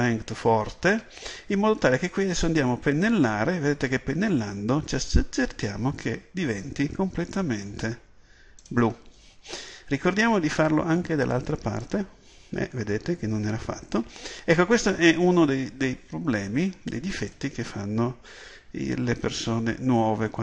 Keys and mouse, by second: 2.5-20.4 drag.